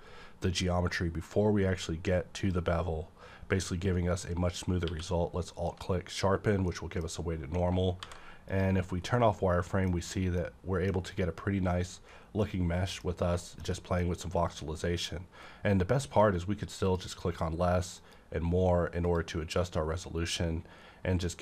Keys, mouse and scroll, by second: 2.4 shift+scroll up 1, 2.6 click, 2.8-3.2 scroll down 1, 4.8 q, 5.5 click, 6.3 scroll down 1, 6.7-8.5 middle drag, 8.0 v, 8.5 click, 8.8 scroll down 1, 9.0 middle click, 9.1-10.4 middle drag, 10.0-10.4 scroll up 1, 10.4-12.4 middle drag, 11.0-12.4 scroll up 1, 12.4 middle click, 12.7 scroll down 1, 13.4 middle click, 13.7 middle click, 16.8 click, 16.9 double middle click, 18.0 click.